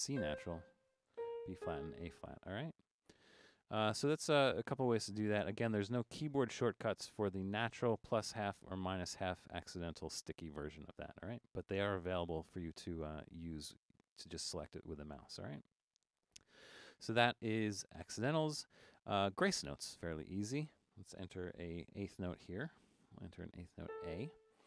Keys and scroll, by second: 0.1 typing, 1.1-1.6 typing, 3.5-5.4 typing, 21.7 4, 23.8 a.